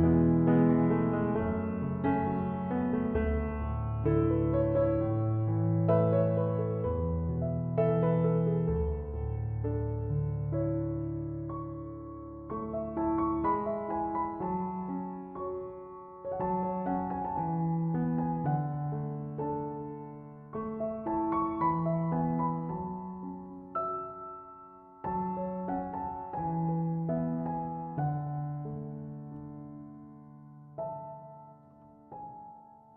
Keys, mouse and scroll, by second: 1.4 1, 1.6 Return, 23.3 ., 23.6 5, 23.9 Return.